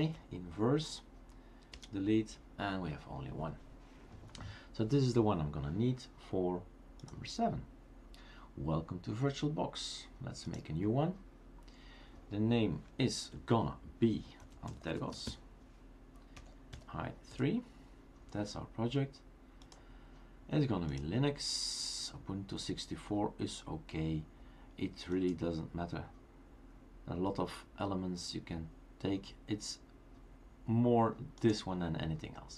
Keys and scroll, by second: 1.7 Delete, 14.0-16.9 typing, 18.1-18.8 typing.